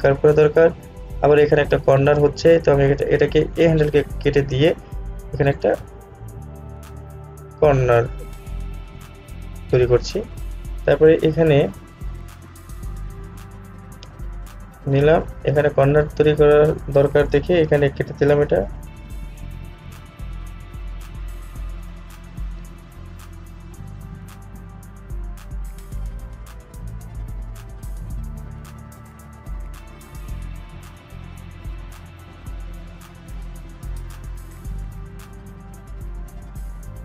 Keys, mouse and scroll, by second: 6.9 click, 7.0-12.1 drag, 12.5-17.4 drag, 19.7-21.9 drag, 22.3-22.6 scroll down 1, 26.2-37.0 drag.